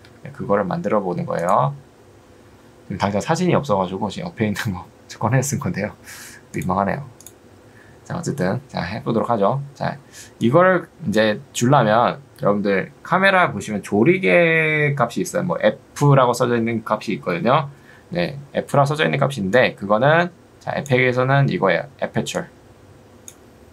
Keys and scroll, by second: 0.1 Escape, 11.7 Escape.